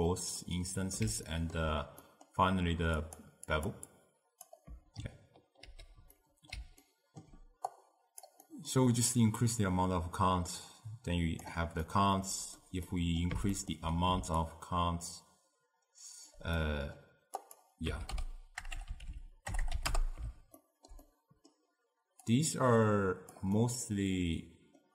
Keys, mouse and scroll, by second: 0.9-3.1 middle drag, 3.1 click, 3.6 click, 4.0-5.7 drag, 5.7 ctrl+h, 6.2-7.7 middle drag, 7.7 click, 8.5 middle click, 9.2-11.9 drag, 11.9-14.5 middle drag, 14.5-16.6 shift+drag, 16.6 middle click, 17.5-18.8 drag, 18.8 BackSpace, 19.7 BackSpace, 20.7-22.3 ctrl+middle drag, 22.3 click, 23.7-24.9 middle drag.